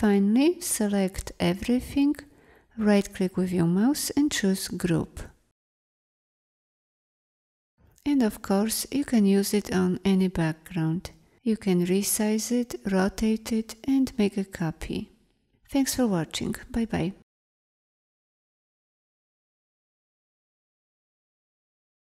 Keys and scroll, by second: 18.8 space.